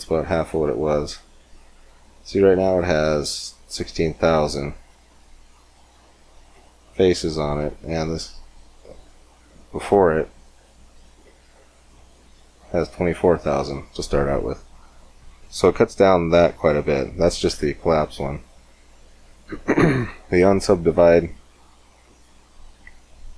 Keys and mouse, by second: 10.3-12.3 drag, 18.2-19.8 drag, 19.8 middle click, 20.7-22.4 drag.